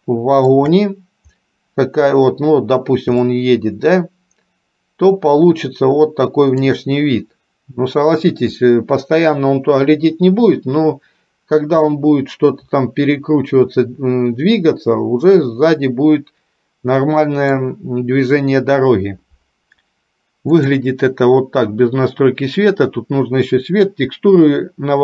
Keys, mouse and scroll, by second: 3.5-6.8 shift+middle drag, 12.3-17.9 middle drag.